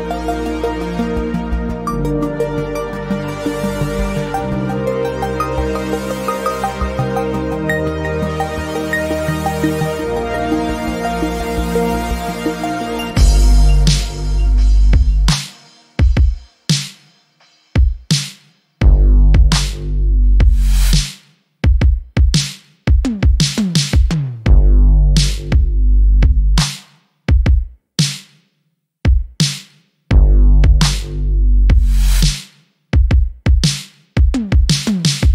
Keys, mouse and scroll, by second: 0.0-0.4 scroll up 1, 0.4 ctrl+z, 0.8 alt+click, 3.2 alt+middle click, 3.8 click, 4.2-4.5 scroll down 1, 4.7 alt+click, 6.2 right click, 6.6 click, 9.3 Escape, 10.0 alt+click, 11.3 alt+middle click, 11.6 scroll up 1, 12.1 alt+click, 16.6 right click, 17.1 click, 20.6 alt+middle click, 21.6 alt+click, 22.2 right click, 23.0 click, 27.0 scroll down 1, 27.6 alt+click, 28.7-29.8 scroll up 1, 30.3 alt+middle click, 31.2 scroll down 1, 31.7 alt+middle click, 32.0-32.5 scroll up 1, 32.6 alt+click, 33.8 scroll down 1, 34.0 alt+middle click, 34.6 alt+click.